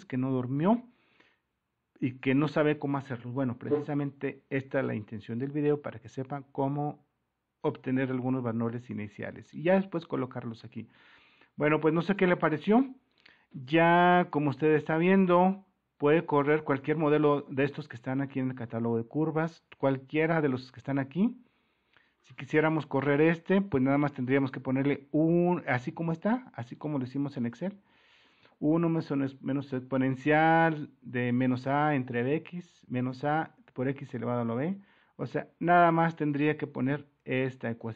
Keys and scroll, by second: 8.2 super+-, 11.6 alt+Tab, 16.5 Tab, 17.4 alt+Tab.